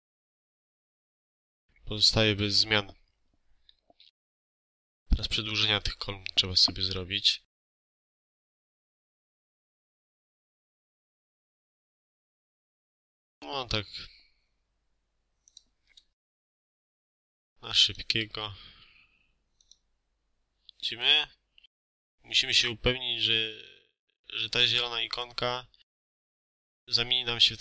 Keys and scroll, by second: 0.7 0, 0.9 1, 1.0 Return, 1.2 space, 2.3 Escape, 15.6 Escape, 15.9 space, 17.9 Escape, 18.1 space, 26.6 Escape.